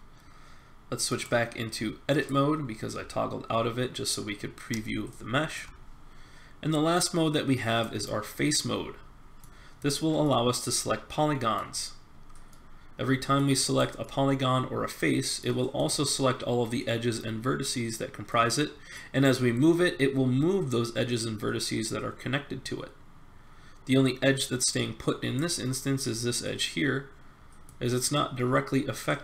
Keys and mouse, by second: 8.4 middle click, 13.7-15.1 middle drag, 15.1 click, 15.6 middle click, 15.8-17.7 drag, 18.3-19.5 middle drag, 19.5 click, 27.6 click.